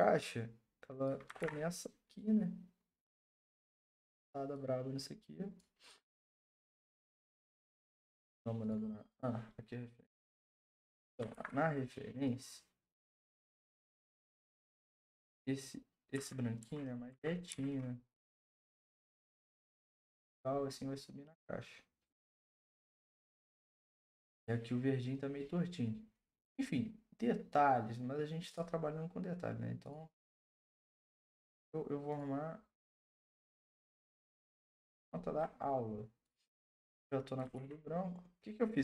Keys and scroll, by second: 1.4 ctrl+t, 7.4 Return, 11.3 ctrl+t, 15.1 Return, 16.1 Right, 16.6 Right, 17.1 Right, 17.5 Left, 34.8 ctrl+Return, 37.5 ctrl+d.